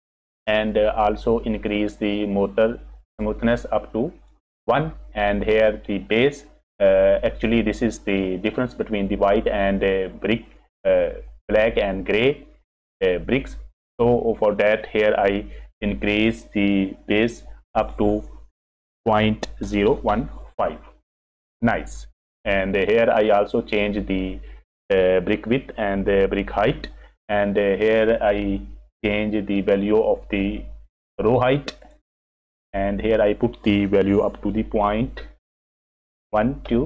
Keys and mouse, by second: 0.0 F6, 2.4 click, 3.2 middle click, 3.7 click, 17.8-21.1 drag, 23.5 middle click, 31.8-36.8 drag.